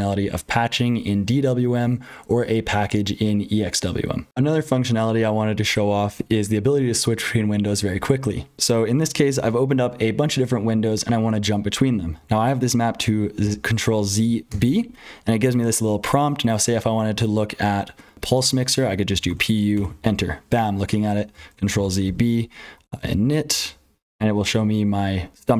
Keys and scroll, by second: 0.0-25.5 typing, 4.3 super+h, 4.3 F12, 13.4 ctrl+z, 21.7 ctrl+z.